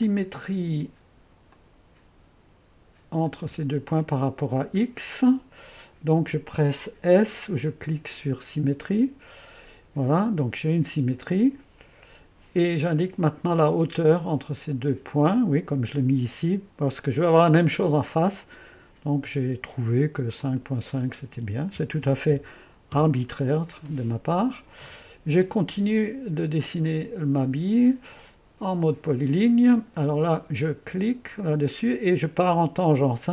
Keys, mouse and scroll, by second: 0.0 click, 1.5 click, 3.2 click, 8.8 s, 11.2-15.8 drag, 20.4 click, 21.5-22.3 typing, 22.9 Return, 26.6-28.3 drag, 28.8-29.8 drag, 31.4-33.3 drag.